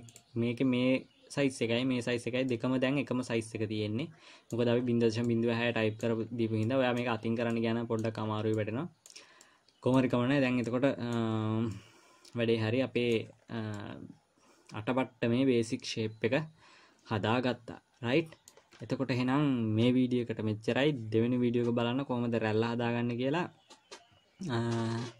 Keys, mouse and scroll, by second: 0.5 click, 2.9 middle click, 5.1-5.6 scroll up 2, 5.6 middle click, 6.6-7.1 scroll down 2, 7.1 middle click, 7.6 scroll up 2, 7.9 middle click, 8.6-8.9 scroll down 2, 8.9 middle click, 9.7 scroll down 2, 9.8 middle click, 10.5-11.1 scroll up 4, 11.1 middle click, 11.8 scroll down 2, 12.1 middle click, 13.7-14.1 scroll down 3, 14.1 middle click.